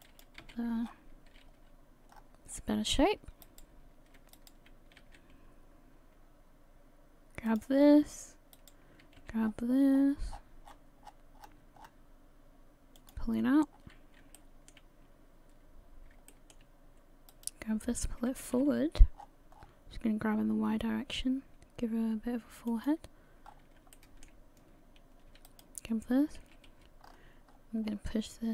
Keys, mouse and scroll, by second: 0.4 a, 0.8 scroll down 7, 1.3 a, 1.5 a, 1.8-2.1 scroll down 1, 2.1-3.4 scroll up 7, 3.4 right click, 4.3 shift+right click, 5.0 g, 7.8 scroll down 5, 7.9 scroll up 1, 8.6 right click, 9.2 g, 13.4-14.2 scroll down 6, 14.4 shift+middle click, 15.9 scroll up 2, 16.3 shift+middle click, 17.3 right click, 18.3 g, 23.5 scroll up 3, 23.9 shift+middle click, 25.5 alt+right click, 26.5 g.